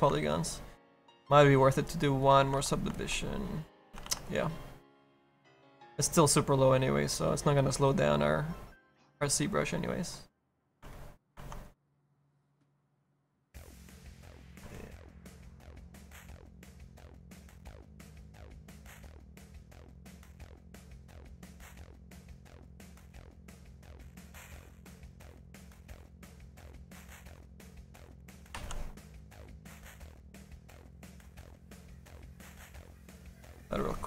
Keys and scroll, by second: 4.0 ctrl+z, 18.5 ctrl+z, 20.4 ctrl+z.